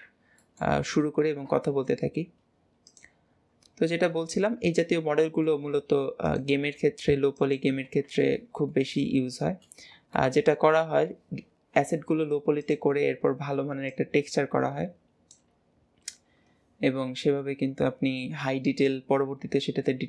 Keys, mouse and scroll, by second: 0.4-1.3 middle drag, 4.2 KP_7, 4.9-5.7 middle drag, 4.9-5.3 scroll, 8.4 shift+middle click, 10.2 middle click, 13.9 click.